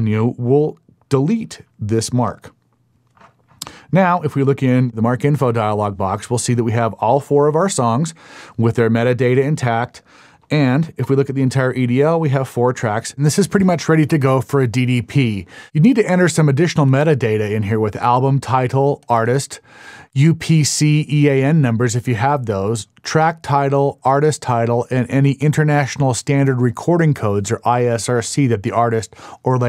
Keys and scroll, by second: 10.6 super+e.